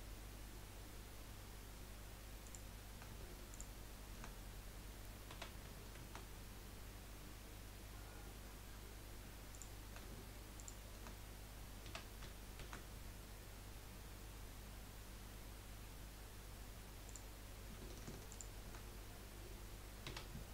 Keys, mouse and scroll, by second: 3.5 alt+shift+click, 5.3 s, 10.5 alt+shift+click, 11.8 s, 18.3 alt+shift+click, 20.0 s.